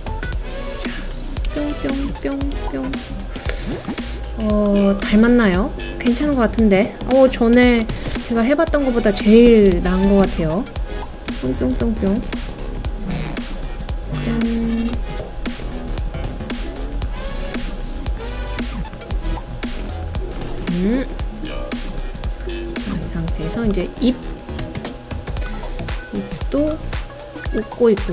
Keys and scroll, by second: 1.5 Left, 1.7 Left, 2.1 Down, 2.5 Left, 7.8 super+c, 8.1 super+v, 9.7 Right, 9.9 Right, 10.0 Right, 10.2 Right, 10.7 Right, 10.8 Right.